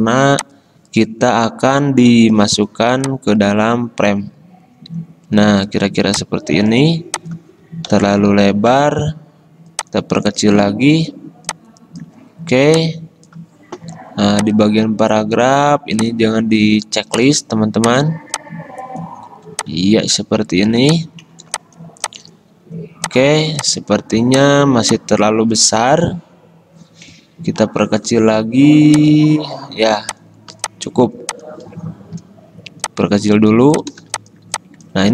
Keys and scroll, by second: 8.1 alt+Up, 28.0 ctrl+t.